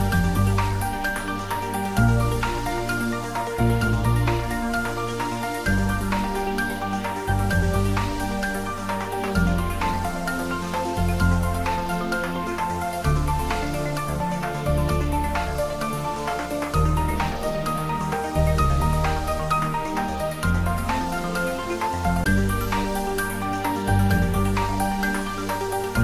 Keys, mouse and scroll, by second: 0.8 click, 1.6-2.0 scroll up 1, 2.9 g, 3.2 z, 4.2 click, 5.2 g, 5.8 z, 6.3 click, 7.1 g, 7.4 z, 9.0 click, 9.4-10.3 typing, 11.0 click, 11.9 ctrl+r, 13.2 click, 14.6 ctrl+z, 15.4 ctrl+r, 16.6 click, 17.7 s, 18.8 click, 19.5 ctrl+b, 22.1 click, 22.7 Tab, 23.1 scroll up 1, 23.9-25.5 middle drag, 25.5-25.9 scroll down 1, 25.9-26.0 middle drag.